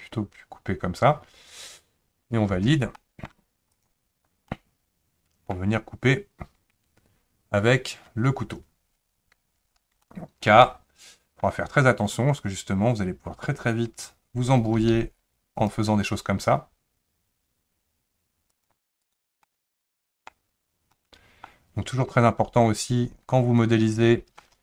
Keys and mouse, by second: 3.0 middle click, 3.7 click, 4.5-5.5 middle drag, 10.1 shift+middle click, 10.6 middle click, 14.8 k, 19.5-24.6 middle drag.